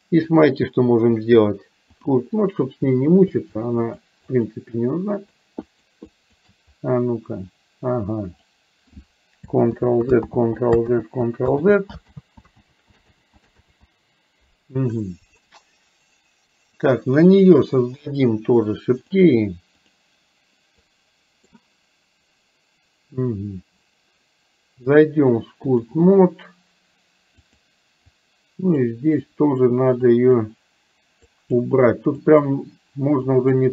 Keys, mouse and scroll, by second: 0.5-2.1 drag, 3.9 shift+click, 4.4 shift+click, 4.7 shift+click, 5.7 shift+click, 6.2 shift+click, 7.6-8.6 drag, 9.7 ctrl+z, 10.2 ctrl+z, 11.1 ctrl+z, 11.7 ctrl+z, 12.2 ctrl+z, 12.7 ctrl+z, 13.2 ctrl+z, 13.6 ctrl+z, 17.4 click, 19.0 click, 20.9 click, 24.9-26.0 drag, 27.5 click, 28.1 click, 29.4 click, 30.2 click, 31.4 click, 32.4 click, 33.2 click.